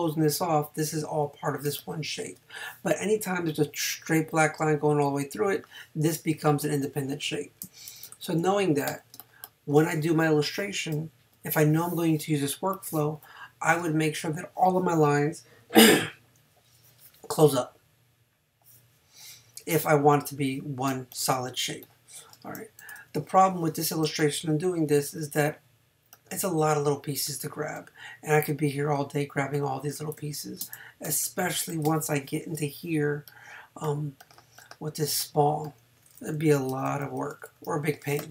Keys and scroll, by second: 1.7 space, 8.1 super+-, 10.9 space, 12.3 space, 20.9 space, 23.0 super+-, 30.2 space, 36.9 super+-.